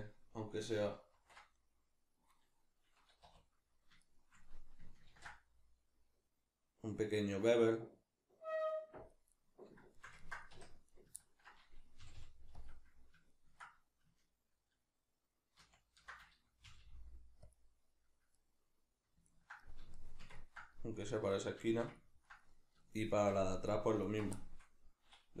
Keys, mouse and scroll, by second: 1.1 ctrl+shift+b, 2.5 right click, 3.2 2, 4.0 shift+right click, 5.1 ctrl+b, 9.1 click, 9.4-10.9 middle drag, 10.6 1, 10.9 right click, 11.2-12.6 ctrl+middle drag, 12.0 g, 12.6 click, 13.3-17.6 ctrl+middle drag, 15.6 ctrl+z, 17.6 click, 18.4-24.0 middle drag, 24.0 alt+right click, 24.4-25.4 shift+middle drag.